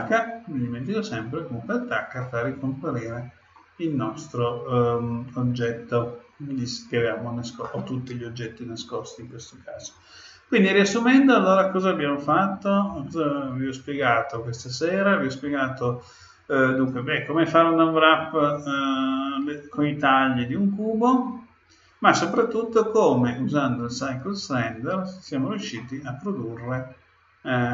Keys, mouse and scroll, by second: 0.3 middle click, 2.2-4.1 middle drag, 25.7-27.6 middle drag.